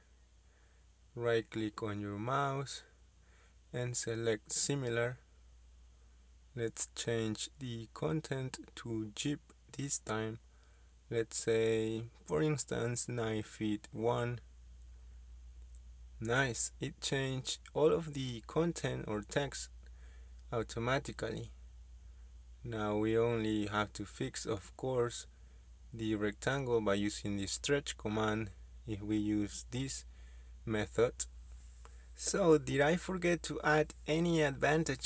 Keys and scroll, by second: 8.7-10.0 typing, 11.3 space, 11.7 KP_9, 14.7 KP_1, 16.1 Return, 19.7 Escape, 21.4 Escape, 22.3 s, 22.5 space, 26.4 space.